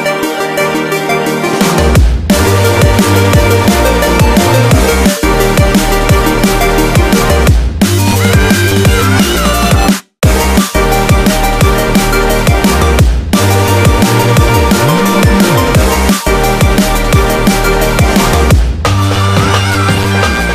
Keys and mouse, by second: 2.0-3.4 ctrl+middle drag, 3.4 Tab, 4.6-10.8 ctrl+middle drag, 10.8 shift+right click, 11.9 shift+a, 17.5 ctrl+KP_2, 17.8-18.2 ctrl+KP_2, 18.9-20.5 ctrl+middle drag.